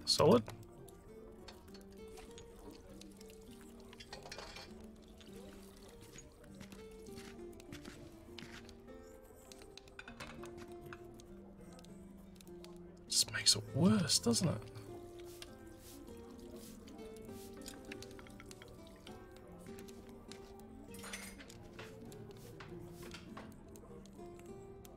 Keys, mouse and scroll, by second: 0.7 alt+middle click, 1.7 alt+middle click, 3.6 click, 7.6 click, 11.8 click, 16.7 click, 17.2 click.